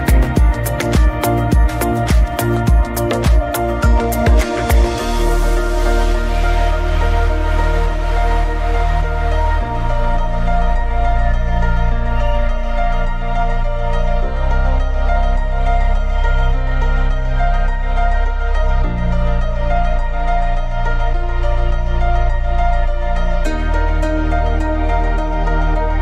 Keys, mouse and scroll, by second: 4.4-5.4 drag, 5.4 right click, 6.4-7.1 drag, 7.1 scroll down 2, 7.3-8.7 middle drag, 8.7-11.9 shift+drag, 11.9 scroll down 2, 12.2-12.9 middle drag, 12.9 scroll down 2, 13.1-13.5 middle drag, 13.5-14.1 scroll up 2, 15.1-16.1 drag, 16.1 scroll down 2, 16.3-16.7 middle drag, 16.7 scroll up 2, 17.0 scroll down 2, 17.2-18.0 middle drag, 18.0 scroll down 2, 18.2 shift+middle drag, 18.5-18.9 scroll up 2, 18.9-19.3 middle drag, 19.3-19.7 scroll down 2, 19.7 middle drag, 19.9-20.4 scroll up 2, 20.4-21.0 middle drag, 21.0 scroll down 2, 21.1-21.5 middle drag, 21.5 scroll down 2, 21.6-22.5 scroll up 4, 21.6 middle click, 22.5-24.0 middle drag, 24.0-24.3 scroll down 2, 24.3-26.0 middle drag.